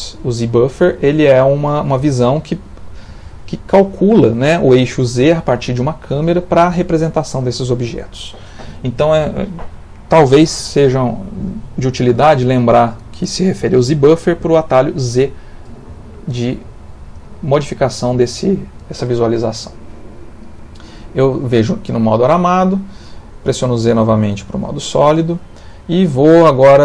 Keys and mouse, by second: 15.1 z, 17.8 z, 19.4 middle click, 20.9 middle click, 23.5 z, 25.6 middle click.